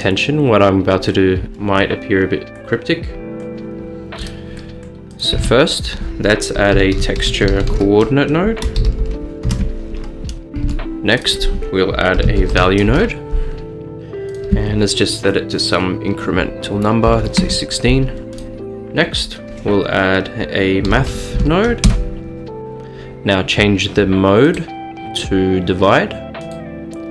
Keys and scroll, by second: 5.4 a, 6.8-7.7 typing, 8.9 typing, 9.5 Return, 10.7 a, 12.0-14.2 typing, 12.9 Return, 15.7-18.6 typing, 20.9-22.0 typing, 25.9-26.7 typing.